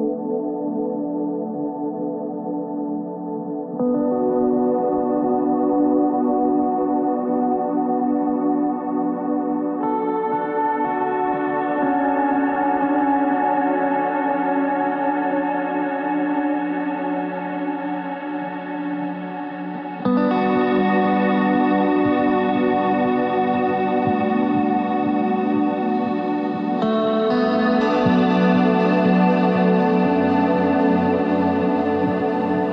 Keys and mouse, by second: 2.2 ctrl+Tab, 4.6 ctrl+r, 5.2 ctrl+r, 5.7 ctrl+Tab, 8.7 middle click, 9.4 e, 11.2 Tab, 12.9-14.1 middle drag, 14.7 Tab, 15.5 click, 17.4-18.8 middle drag, 18.8 e, 19.4 ctrl+z, 20.0 w, 22.5-23.9 drag, 23.9 w, 28.3 KP_1, 29.6 ctrl+Tab, 32.1 KP_1, 32.4 z.